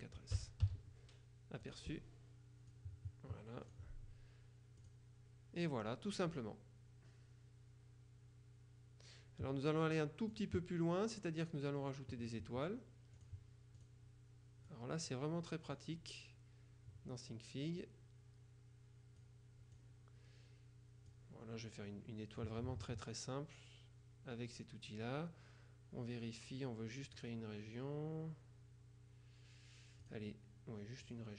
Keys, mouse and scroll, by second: 0.4 KP_4, 0.7 s, 1.7 click, 2.7-4.3 drag, 4.9 click, 10.4 click, 13.3 click, 14.8-16.3 drag, 19.9 click, 22.5 click, 24.6 click, 27.2 click, 30.1 click, 31.1 click.